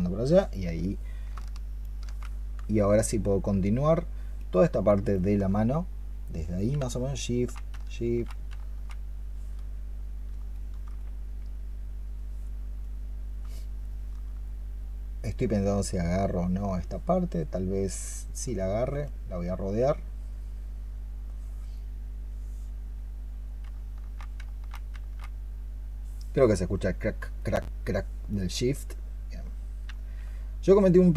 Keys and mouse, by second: 1.1 alt+click, 1.7 ctrl+shift+click, 4.9 ctrl+shift+click, 6.6 alt+click, 10.4 alt+click, 13.7 alt+click.